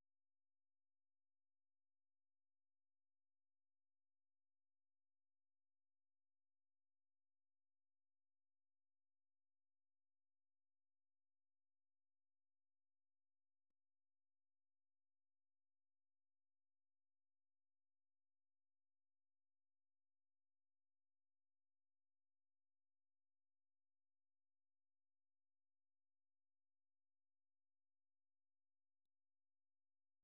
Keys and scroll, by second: 3.5 Up, 4.0-5.2 typing, 9.4-17.4 typing, 27.4 super+1, 27.6-30.2 typing.